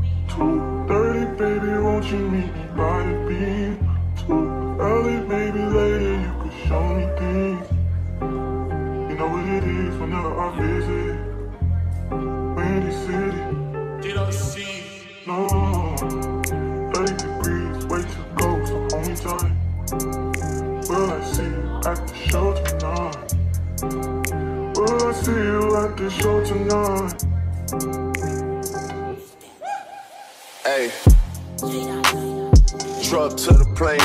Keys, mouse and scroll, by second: 0.6 middle click, 0.8 middle click, 24.9 Return.